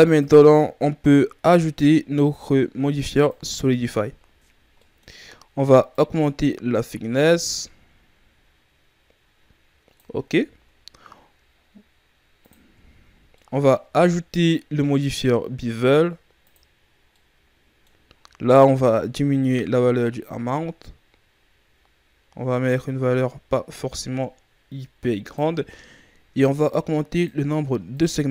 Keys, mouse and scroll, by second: 0.0 click, 4.0-4.7 shift+scroll up 4, 4.7-5.8 middle drag, 5.8 shift+click, 10.3-12.3 shift+scroll down 1, 12.3 click, 12.8-13.2 shift+scroll down 4, 13.2 middle click, 13.7-14.8 scroll up 2, 14.9 click, 17.0 scroll up 1, 17.1-18.9 middle drag, 18.9 click, 26.4 click.